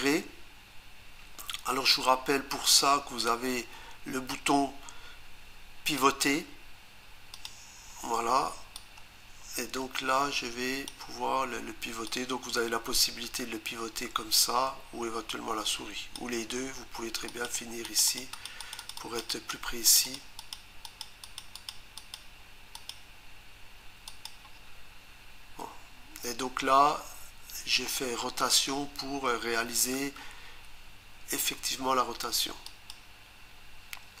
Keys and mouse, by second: 6.0 click, 7.3 click, 12.1 click, 17.3 click, 17.8 click, 18.1 click, 18.3 click, 18.5 double click, 18.6 click, 18.9 double click, 19.0 click, 19.3 click, 19.9 click, 20.0 click, 20.1 double click, 20.4 click, 20.9 click, 21.0 double click, 21.2 click, 21.6 click, 21.7 double click, 22.0 click, 22.7 click, 24.1 click, 32.7 click.